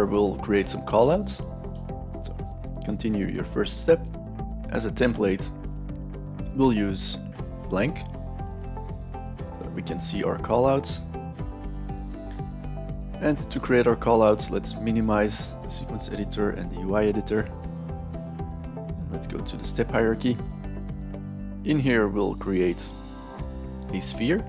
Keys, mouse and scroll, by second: 1.2 right click, 4.0 click, 4.0 right click, 4.5-4.8 drag, 4.5-4.8 right drag, 5.6 click, 7.8 click, 10.4-11.2 alt+right drag, 11.5 alt+right click, 11.8-12.3 alt+middle drag, 12.6 alt+right drag, 13.0 alt+middle click, 15.8 click, 16.8 click, 19.1 click, 22.3 click, 24.0 click.